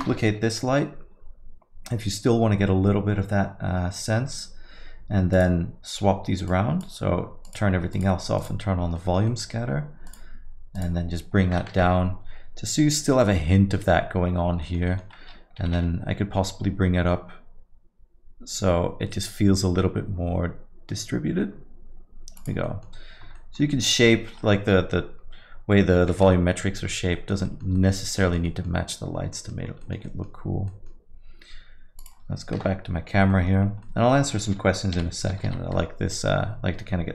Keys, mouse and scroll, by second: 5.3 click, 6.5 click, 9.0 click, 9.0 middle click, 9.3 alt+middle click, 10.1 click, 10.7 click, 11.7 KP_0, 14.6 middle click, 14.9 alt+middle click, 15.6 g, 22.6 alt+middle click, 23.3 middle click, 25.7 middle click, 27.1 middle click, 27.4 alt+middle click, 27.7 middle click, 28.0 scroll down 1, 28.2 alt+middle click, 28.4 middle click, 29.3 middle click, 29.4 alt+middle click, 29.6 scroll down 1, 29.8 alt+middle click, 30.0 middle click, 30.7 middle click, 32.0 click, 32.6 KP_0, 33.3 middle click, 33.6 scroll up 1, 33.8 middle click, 35.0 g.